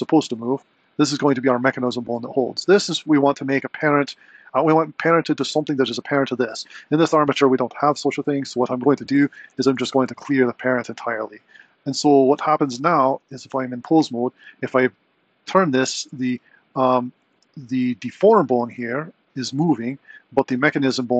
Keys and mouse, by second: 0.3 click, 9.2 Tab, 10.0 alt+p, 12.5 click, 13.2 Tab, 13.9 r, 16.9 r, 18.1 click, 20.6 click.